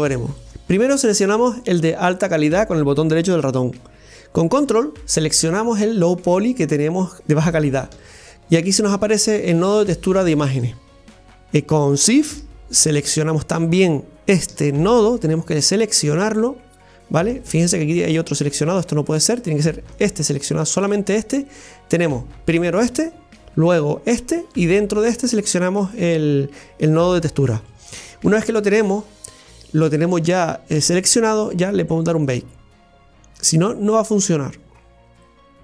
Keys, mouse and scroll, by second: 1.6 click, 6.2 ctrl+click, 13.0-14.8 shift+drag, 18.1 shift+click, 20.0 shift+click, 34.4-35.4 drag.